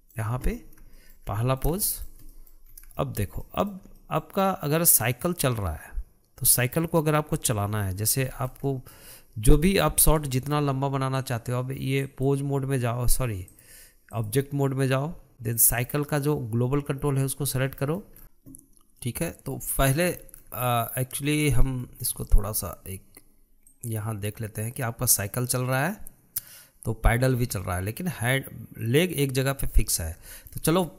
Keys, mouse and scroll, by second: 0.5-3.6 middle drag, 3.6 scroll up 1, 3.9-8.5 shift+middle drag, 8.5-9.2 scroll down 2, 9.2-10.6 shift+middle drag, 10.6 click, 11.3 shift+middle click, 12.0-16.6 drag, 19.4-22.4 middle drag, 22.4 scroll up 1, 22.6-24.1 shift+middle drag, 24.1 click, 30.2 ctrl+z, 30.7-30.9 shift+middle drag.